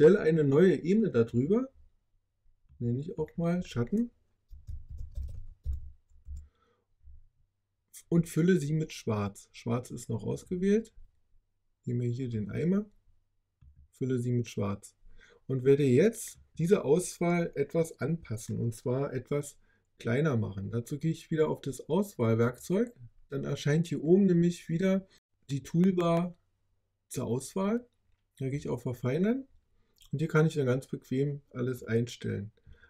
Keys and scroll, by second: 4.2-6.0 typing, 6.1 Return.